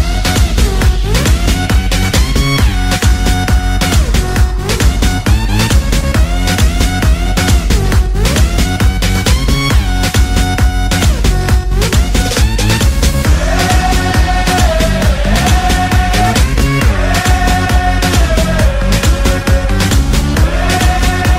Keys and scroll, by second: 1.1 ctrl+z, 1.6 ctrl+z, 2.2 ctrl+z, 9.6 ctrl+z, 9.9 ctrl+z, 11.6 ctrl+z, 12.5 space, 16.3 ctrl+z, 16.5 ctrl+z, 17.2 ctrl+z, 17.8 space, 18.4 space, 18.6 space.